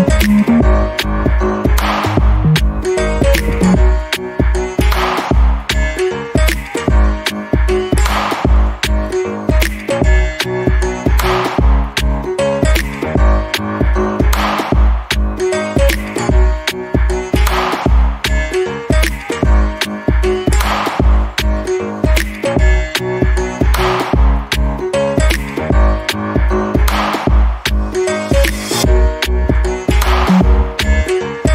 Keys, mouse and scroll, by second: 1.9 alt+middle click, 4.3 click, 5.5 alt+middle click, 6.5 click, 7.6 scroll down 1, 7.9 alt+middle click, 10.3-10.6 alt+scroll up 2, 10.6 right click, 11.1 click, 13.4 Escape, 13.7-14.0 scroll down 1, 14.0 alt+middle click, 15.4 click, 17.4 Escape, 18.3 click, 19.8 =, 20.2 BackSpace, 20.9 click, 21.4 BackSpace, 21.9-22.6 scroll down 1, 22.6 alt+middle click, 23.0-24.8 scroll up 1, 24.8 middle click, 25.5 alt+click, 29.8 alt+middle click, 30.1 alt+click, 31.0 scroll up 1.